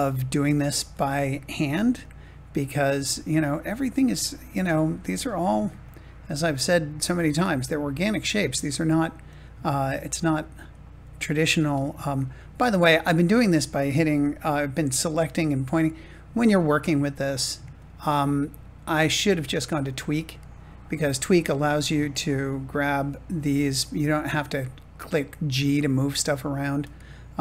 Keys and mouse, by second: 0.7 g, 1.9 click, 3.0 g, 4.3 click, 7.0 click, 7.5 g, 10.2 click, 10.9 g, 23.3 click, 23.5 click, 25.0 click, 26.5-27.4 drag.